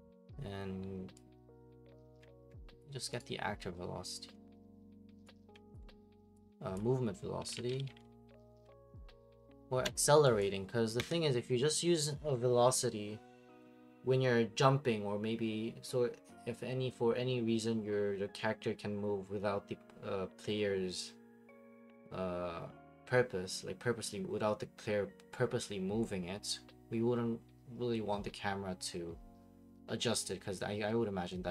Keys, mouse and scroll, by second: 0.0-31.5 typing, 2.2 right click, 2.8 click, 3.2 right click, 5.5 right click, 5.7 ctrl+click, 6.7 click, 9.8 Escape, 10.4 click, 11.0 Delete.